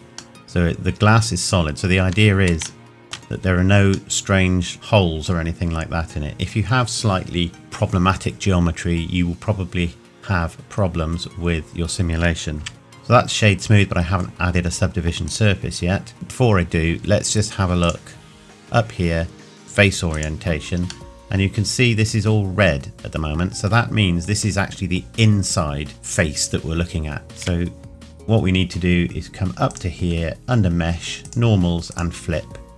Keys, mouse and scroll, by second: 2.0 Tab, 2.8 shift+middle click, 3.4-4.1 scroll up 1, 4.1 middle click, 5.5-7.4 scroll down 1, 12.6 n, 12.9 click, 13.0 middle click, 15.3 right click, 16.1 middle click, 17.8 click, 21.1 middle click, 23.7 scroll down 1, 27.2 Tab, 27.4 a, 29.7 click.